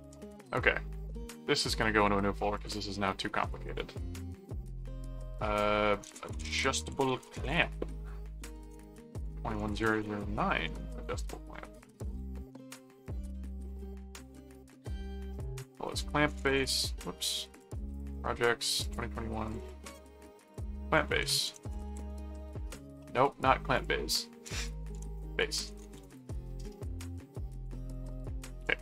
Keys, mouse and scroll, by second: 0.0 ctrl+s, 2.0 click, 2.6 click, 2.7 right click, 3.4 click, 4.3 click, 5.8-16.3 typing, 8.6 ctrl+a, 15.3 click, 17.5 click, 18.7 click, 19.4 click, 20.1 scroll up 2, 20.5 click, 20.8-22.5 typing, 23.7 click, 25.0-26.5 typing, 27.0 click, 27.8 ctrl+click, 28.6 ctrl+s.